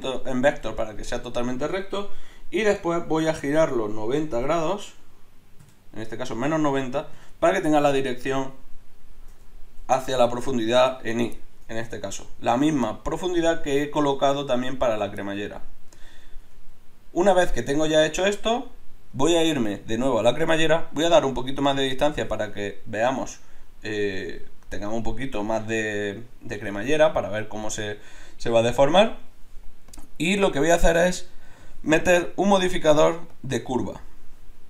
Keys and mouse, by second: 3.6 r, 8.9 middle click, 11.6-12.6 middle drag, 12.8 middle click, 13.0 middle click, 15.5 middle click, 15.7 middle click, 16.4 Tab, 24.3 middle click, 24.5 middle click, 29.9-33.4 drag.